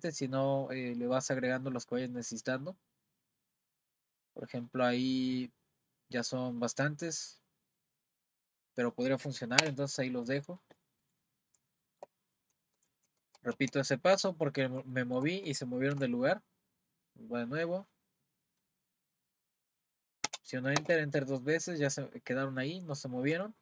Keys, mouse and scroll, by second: 11.0 click, 11.7 shift+middle click, 12.9 z, 13.5 z, 14.3-15.5 middle drag, 15.9 r, 21.8 click, 22.3-22.6 scroll down 2, 22.6-23.6 middle drag.